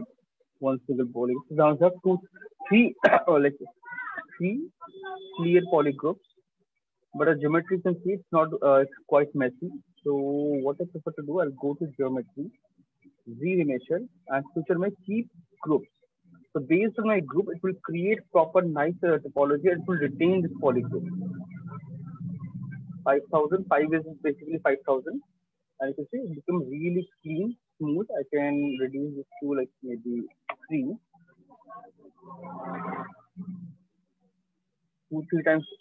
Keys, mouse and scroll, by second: 0.6 shift+click, 0.7 shift+click, 3.4 click, 6.3 shift+click, 7.0 right click, 7.5 alt+click, 11.4 click, 13.0 click, 15.3 click, 19.4 click, 22.2 click, 22.8-24.5 drag, 25.6 click, 27.6 click, 28.8 click, 29.8 3, 30.0 Return, 30.8 Return, 31.1 click, 33.1 click, 35.0 click.